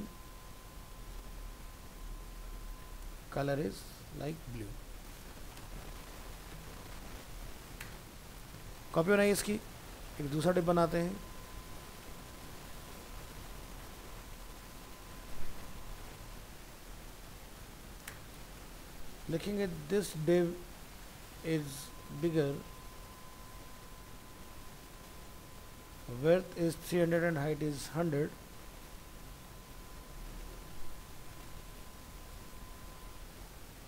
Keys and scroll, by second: 6.6 ctrl+Left, 8.9 ctrl+c, 9.6 ctrl+v, 13.4 ctrl+s, 22.6 ctrl+shift+Right.